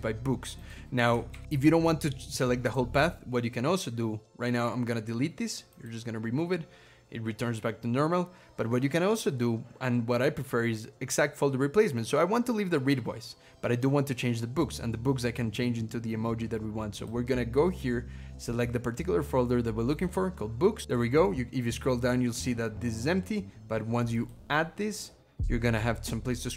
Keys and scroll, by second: 1.2 ctrl+-, 2.5 ctrl+-, 2.6 ctrl+,.